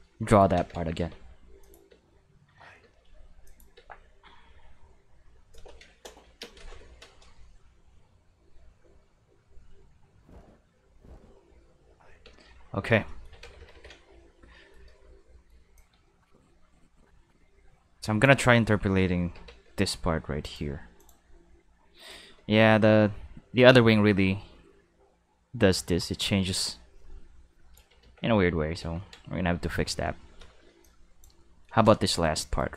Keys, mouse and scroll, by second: 0.5 ctrl+s, 1.0 Tab, 1.6 click, 1.9 space, 2.8 space, 3.4 click, 3.7 space, 5.5 space, 6.4 space, 12.2 space, 13.4 ctrl+s, 13.6 ctrl+s, 13.7 ctrl+s, 14.6 middle click, 15.2 middle click, 15.7-18.2 drag, 18.8 a, 19.3 Tab, 19.6 a, 20.4 click, 21.0 click, 22.1-27.7 drag, 28.0 ctrl+z, 28.8 ctrl+z, 30.8-31.2 drag, 32.2 right click, 32.6 shift+right click.